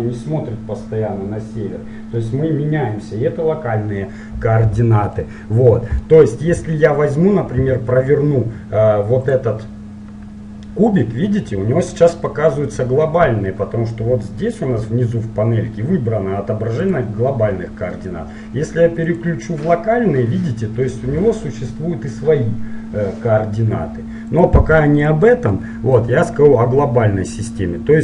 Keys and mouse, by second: 7.8 r, 10.5-14.3 middle drag, 16.8-18.6 drag, 19.9-21.9 middle drag, 24.4-26.2 drag, 25.7 middle click, 27.3 middle click.